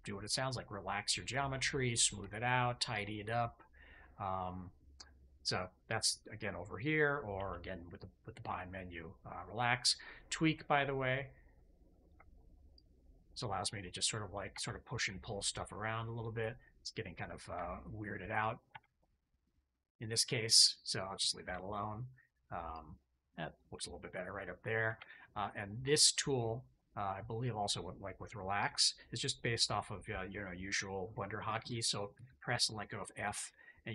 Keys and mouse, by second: 0.4 middle click, 1.4 shift+middle click, 2.0 shift+middle click, 2.8 middle click, 3.2-4.7 middle drag, 7.3 alt+q, 12.6 click, 13.8 click, 14.4 ctrl+z, 14.9 click, 15.4 click, 18.6 ctrl+z, 19.1 click, 20.5 shift+click, 20.9 click, 21.4 shift+click, 22.0 click, 22.6 click, 23.8 click, 24.8 ctrl+z, 25.1 click, 25.8 shift+click, 32.1 f.